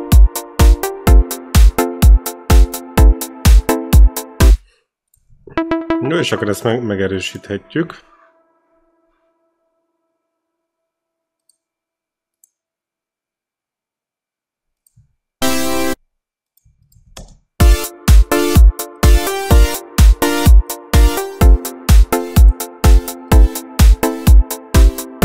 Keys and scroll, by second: 4.3 space, 5.4 e, 14.9-16.2 typing, 16.9 ctrl+c, 17.2 ctrl+v, 17.4 space.